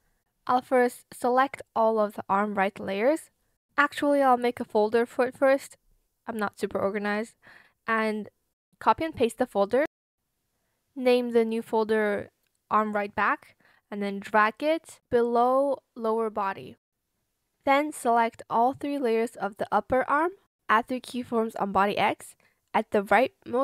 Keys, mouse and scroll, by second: 2.9 shift+click, 5.0-6.1 typing, 6.8 shift+click, 7.5 shift+click, 7.8 ctrl+c, 8.2 ctrl+v, 13.1-14.1 typing, 18.9 shift+click.